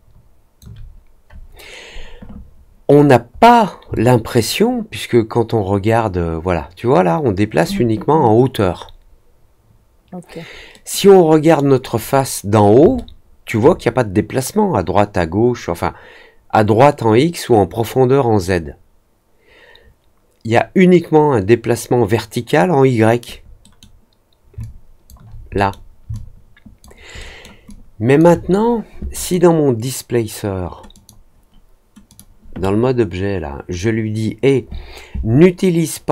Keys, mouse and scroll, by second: 2.9 scroll down 1, 3.0 scroll up 1, 3.2 scroll down 1, 3.9-7.5 alt+drag, 10.7 middle click, 11.3 middle click, 12.0 scroll down 1, 12.9 alt+middle click, 23.5 middle click, 24.5 alt+click, 25.5 middle click, 26.1 alt+click, 27.1 alt+middle click, 27.6 alt+click, 29.1 click, 30.9 click, 32.0 click, 33.7-36.1 drag.